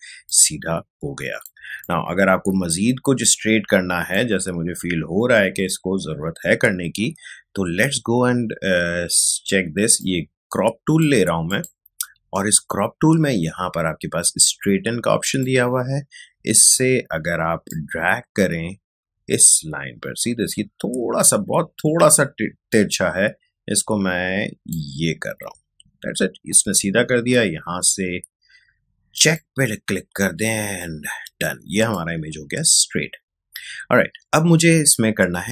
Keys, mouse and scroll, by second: 0.1 space, 0.2 click, 0.6 space, 1.9-6.5 ctrl+drag, 10.0-11.4 drag, 15.2 click, 17.6-29.1 drag, 30.6 space, 30.8 click, 31.0 space.